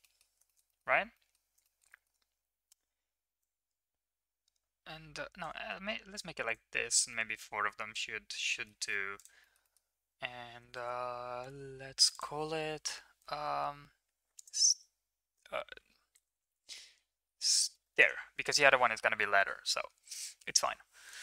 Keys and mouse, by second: 0.0 middle drag, 0.4 middle click, 0.7 middle click, 1.1 middle drag, 1.6 shift+middle drag, 1.9 middle drag, 3.4-5.4 shift+drag, 6.1 click, 7.0-8.6 middle drag, 8.8 ctrl+s, 9.4 middle click, 9.6 middle click, 11.3 KP_Decimal, 12.1-18.0 drag, 16.2 BackSpace.